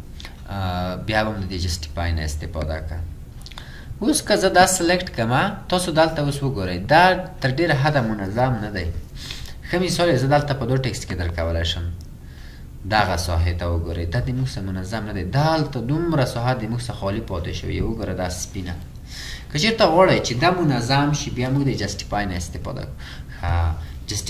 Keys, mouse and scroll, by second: 9.0-10.1 scroll down 4.